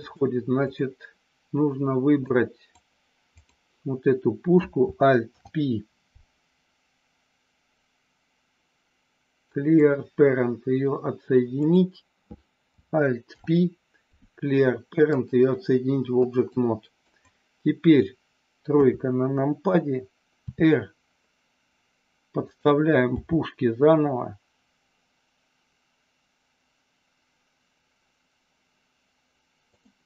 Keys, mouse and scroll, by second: 0.1 click, 2.2 click, 5.2 alt+p, 13.2 alt+p, 16.5 click, 18.7 KP_3, 20.4 r, 23.1 g, 29.7 click.